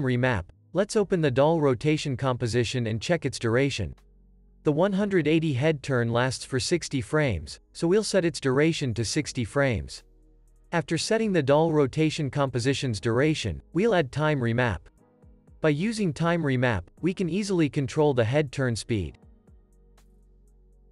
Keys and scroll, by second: 1.0 super+z, 9.2 shift+super+x, 14.7 alt+super+t, 16.0 x, 16.6 z.